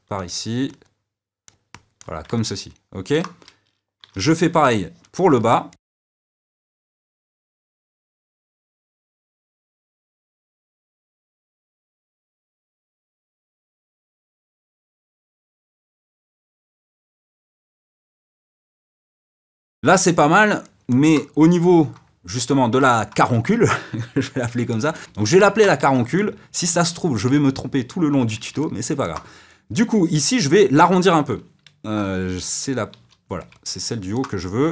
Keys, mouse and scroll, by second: 0.6-2.3 drag, 2.3-4.2 middle drag, 4.2 d, 4.6-5.8 middle drag, 5.8 click, 6.3 middle click, 6.5 click, 6.6 f, 6.8 click, 7.0 middle click, 7.4 f, 7.5 middle click, 7.6 f, 7.7 click, 8.1 shift+middle click, 8.4 f, 8.6 click, 9.1-11.0 shift+middle drag, 11.0 click, 11.9-14.5 middle drag, 14.5 click, 15.4 shift+middle click, 16.4 click, 16.7 shift+middle click, 17.5 click, 17.7 middle click, 18.0 click, 18.7 f, 19.0 click, 19.2-25.0 ctrl+middle drag, 25.0 f, 25.4 middle click, 25.8 f, 28.6-33.2 middle drag, 33.2 d, 33.5-34.6 middle drag, 34.6-34.7 drag.